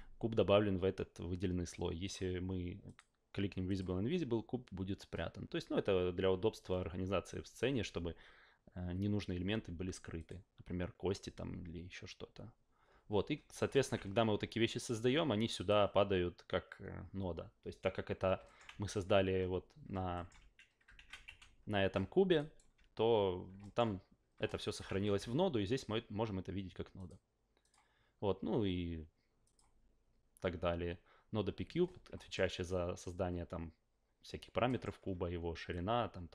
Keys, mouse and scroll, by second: 2.0 click, 2.8 click, 3.7 click, 10.2 click, 13.7 alt+middle click, 13.9 ctrl+a, 15.6 click, 18.4 alt+middle click, 18.7 ctrl+a, 20.1 ctrl+alt+middle click, 20.4 ctrl+a, 21.0 ctrl+a, 21.2 f, 22.3 alt+right drag, 23.6 alt+middle drag, 24.5 alt+middle drag, 24.9 ctrl+a, 27.0 click, 27.6 click, 29.4 click, 32.2 alt+middle click, 34.6 alt+middle click, 35.7-36.3 drag.